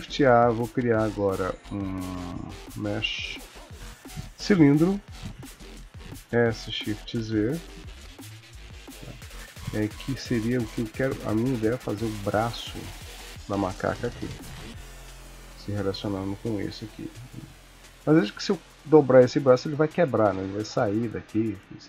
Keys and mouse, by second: 5.1 g, 6.2 s, 9.5 g, 15.5 shift+click, 16.7 r, 18.1 click, 19.2 r, 21.6 shift+middle click.